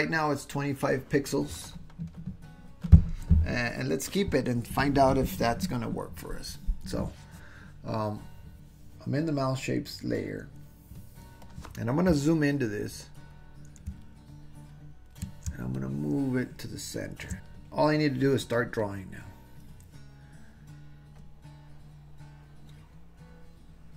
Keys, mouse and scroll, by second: 14.2 ctrl+click, 15.8-17.2 shift+drag, 17.2 shift+middle click, 17.4 super+z, 17.4 click, 18.8 click, 21.2-23.9 drag.